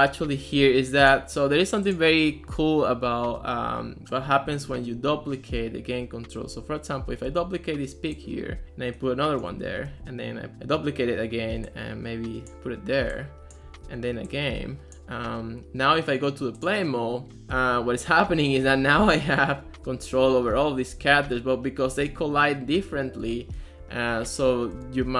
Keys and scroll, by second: 7.3 super+d, 9.9 super+d, 13.9 super+d, 17.6-25.1 typing.